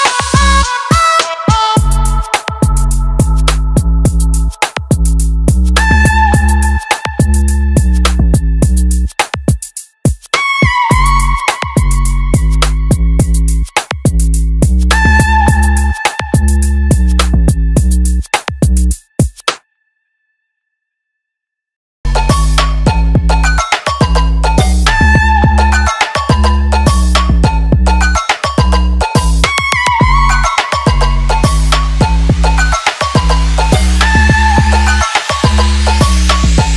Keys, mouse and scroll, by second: 13.0 alt+click, 15.3 alt+click, 16.9 alt+click, 18.3 alt+click, 19.8-24.1 alt+drag, 24.9 alt+click, 26.4-28.0 alt+drag, 29.7-32.8 alt+drag, 34.0 alt+click.